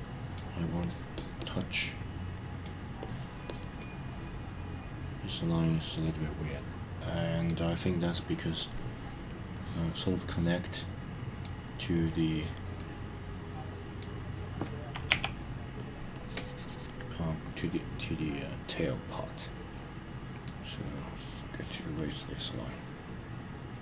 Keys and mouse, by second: 0.8 click, 1.1 click, 1.4 click, 1.8 middle click, 3.0 click, 3.5 click, 3.8-7.5 middle drag, 8.6 click, 9.5 click, 10.8 middle click, 11.9 click, 12.8-14.1 middle drag, 16.1 click, 16.1 e, 17.6-20.4 middle drag, 21.0 click, 22.4-23.8 middle drag.